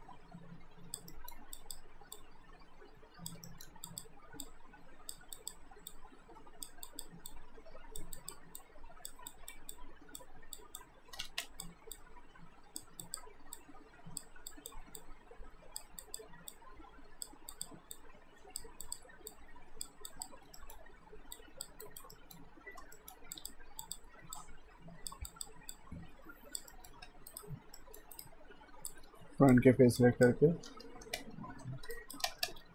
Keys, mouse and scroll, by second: 1.1 alt+middle click, 1.6 click, 3.5 alt+middle click, 3.9 click, 11.2 ctrl+z, 11.4 click, 20.6 alt+middle click, 21.4 click, 21.8 alt+right click, 22.2 alt+middle click, 23.4 click, 26.7 alt+middle click, 27.0 q, 27.3 right click, 27.8 alt+middle click, 28.2 right click, 28.9 click, 30.0 ctrl+click, 30.7 w, 31.9 alt+right click, 32.2 space.